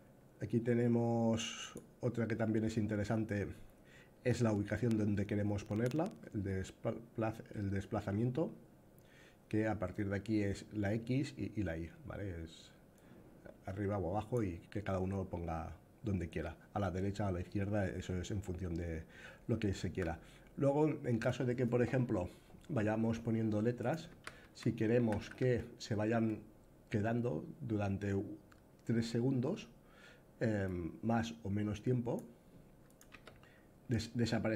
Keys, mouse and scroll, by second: 1.3 click, 3.1-5.6 drag, 12.8-14.1 drag, 23.5 click, 23.8-24.9 typing, 30.3-31.9 drag, 32.6 click, 32.8 a.